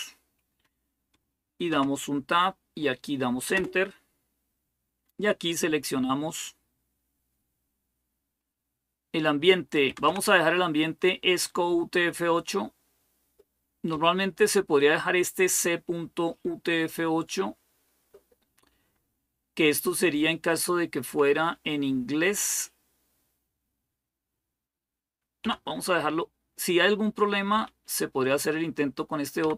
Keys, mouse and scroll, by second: 1.5 Tab, 3.3 Return, 9.7 Down, 9.9 Down, 11.9 Down, 12.1 Down, 13.7 Up, 21.3 Up, 22.1 Down, 25.2 Down, 27.3 Up, 29.2 Down.